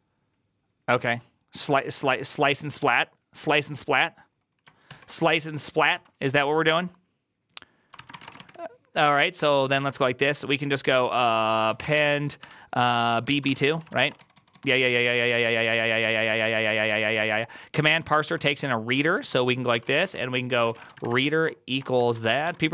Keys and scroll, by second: 5.8 alt+{, 5.8 ctrl+c, 7.8-9.7 typing, 10.7-22.7 typing, 13.1 Tab.